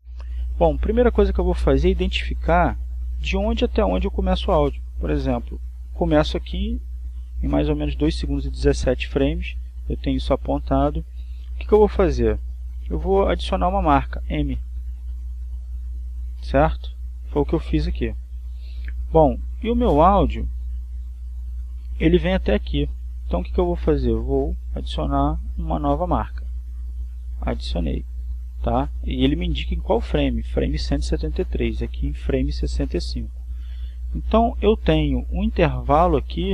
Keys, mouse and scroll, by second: 0.0 click, 4.7-10.9 drag, 13.7 click, 15.4 click, 17.2 right click, 21.7-24.9 drag, 26.0 click, 28.0 click.